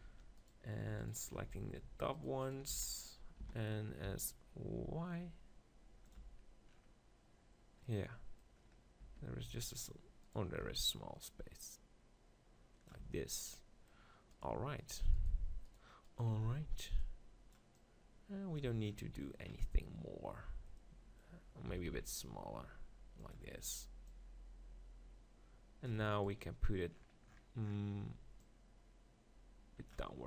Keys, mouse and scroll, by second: 1.4-3.0 right drag, 1.5 z, 3.0 z, 3.4 s, 6.1-8.0 drag, 6.2 Tab, 9.0 Tab, 9.5 s, 10.3 right click, 10.6 Tab, 10.6-11.7 drag, 11.6 right click, 13.2 Tab, 16.5-18.0 right drag, 17.0-19.4 drag, 19.1 Tab, 19.4 middle click, 21.7 s, 23.3-25.9 drag, 26.2-30.1 drag, 30.1-30.2 middle drag.